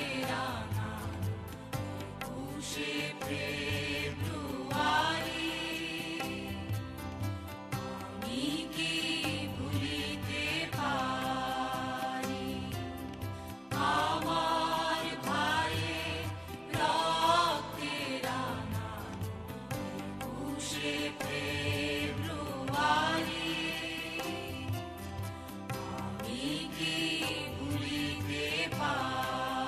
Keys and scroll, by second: 1.2 ctrl+c, 1.5 ctrl+b, 8.3 ctrl+KP_Subtract, 9.0 space, 19.0 ctrl+x, 21.5 ctrl+v, 23.0 space.